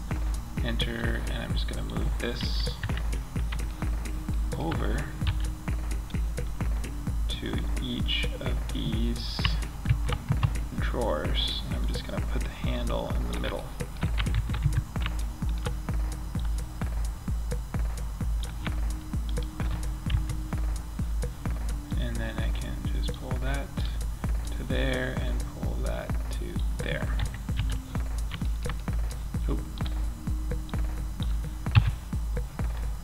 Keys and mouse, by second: 1.6 KP_1, 2.1 KP_5, 4.5 z, 9.1 shift+d, 11.1-13.0 drag, 13.0 middle click, 13.6 shift+d, 15.7-17.7 drag, 18.6 right click, 19.4 KP_3, 20.6-21.1 middle drag, 23.1 right click, 25.0 right click, 26.4 KP_5, 26.9 z, 27.3-29.9 drag, 31.0 KP_Decimal.